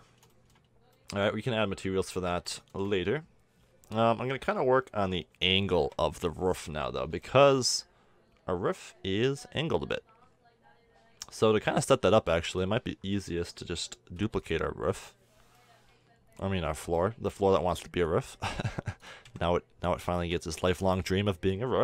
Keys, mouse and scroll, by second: 0.2 middle drag, 5.8 KP_1, 11.7-12.3 middle drag, 14.2 shift+d, 18.0-18.9 drag, 19.2 KP_1.